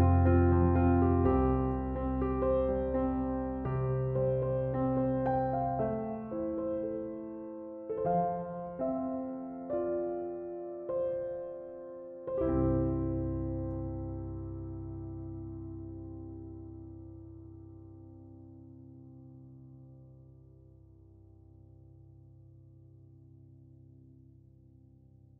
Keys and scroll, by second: 1.8-2.5 typing.